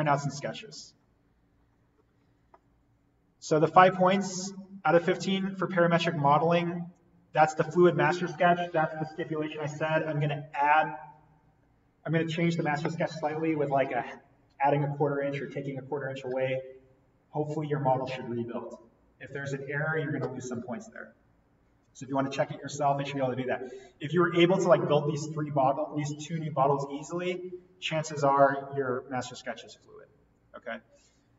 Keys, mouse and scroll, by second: 0.4-1.2 scroll up 1, 24.4-24.8 scroll down 1, 26.9-28.0 scroll up 1.